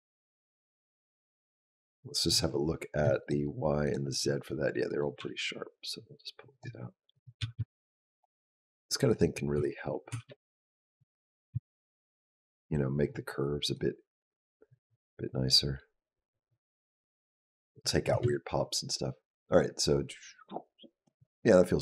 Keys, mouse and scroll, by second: 0.3 click, 3.0 shift+click, 3.7 shift+click, 4.7 click, 5.0 g, 7.0 click, 7.2 g, 8.5 click, 8.9 click, 9.4 b, 9.9 g, 11.3 s, 13.6 click, 18.0 space.